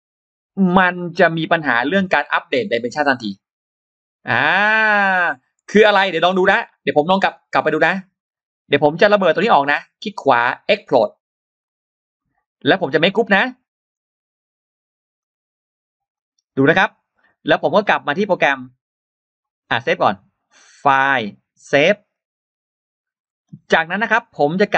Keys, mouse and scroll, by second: 0.8 scroll up 2, 3.4 scroll down 2, 4.0 click, 7.2 click, 8.6-9.2 scroll down 2, 9.4 right click, 11.5 click, 12.7 click, 12.8 click, 13.0 click, 13.1 click, 13.8 right click, 15.0 click, 16.0 click, 20.8 click, 22.0 click, 24.0 click.